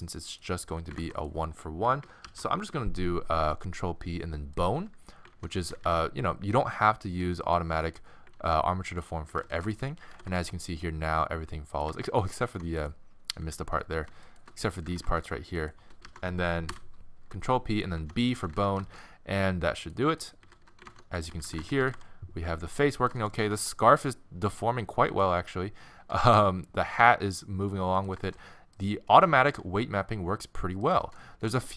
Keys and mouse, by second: 1.0 ctrl+Tab, 2.3 ctrl+p, 5.3 ctrl+Tab, 5.6 z, 7.3 z, 7.5-9.4 right drag, 8.4 ctrl+Tab, 9.2 z, 10.1 r, 12.5 ctrl+Tab, 13.4 z, 13.9 z, 14.6 z, 16.0 ctrl+Tab, 16.0 z, 16.1 ctrl+p, 18.0 ctrl+Tab, 18.3 z, 20.1 z, 20.4 z, 20.9 ctrl+Tab, 21.3 z, 21.9 r, 23.5 r, 26.1 r, 28.3-29.9 middle drag, 29.5 r, 31.2 middle click, 31.4 middle click.